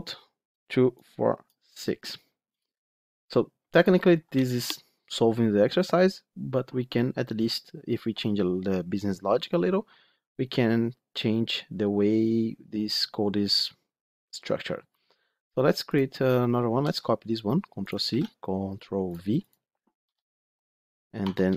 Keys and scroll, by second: 16.7 ctrl+c, 18.0 ctrl+v.